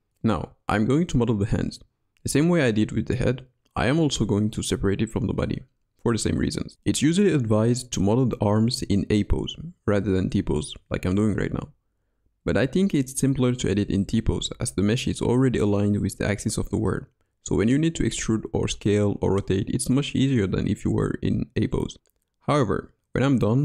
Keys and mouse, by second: 0.0 g, 3.4 s, 3.9 click, 5.4 click, 6.2 click, 7.0 s, 8.0 click, 8.0 right click, 8.7-10.0 middle drag, 11.7 click, 12.2 ctrl+f, 14.4-16.0 middle drag, 16.4 e, 18.2 middle click, 20.5 middle click, 21.2 s, 23.2 click, 23.4 i.